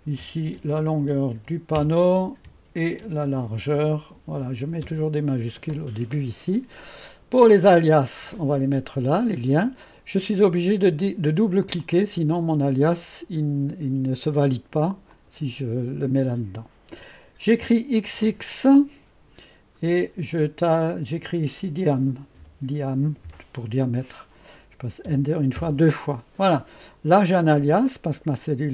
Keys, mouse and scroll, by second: 0.0-1.8 typing, 2.9-5.5 typing, 7.2-8.0 typing, 7.5 click, 11.6 click, 12.5-15.0 drag, 15.1-16.4 drag, 18.1 typing, 22.2-23.3 typing, 25.1 Return, 25.6 Return.